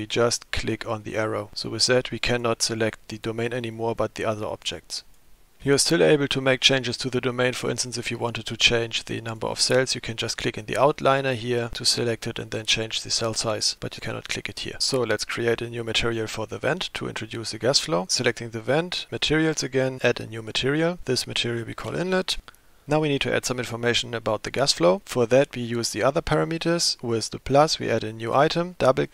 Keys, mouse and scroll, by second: 1.0 click, 1.7 drag, 2.2 drag, 2.7 click, 3.8 click, 4.5 click, 5.0 click, 9.3 click, 14.0 click, 14.3 drag, 18.1 click, 19.1 click, 20.4 click, 21.0-22.9 drag, 27.6 click, 28.7-29.1 drag.